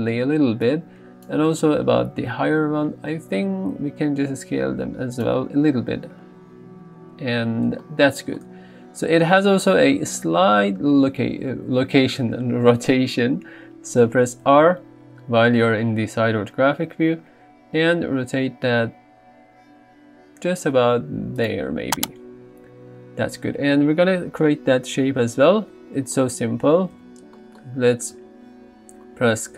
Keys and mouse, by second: 3.7 s, 5.2 click, 21.4 click, 27.1 alt+z.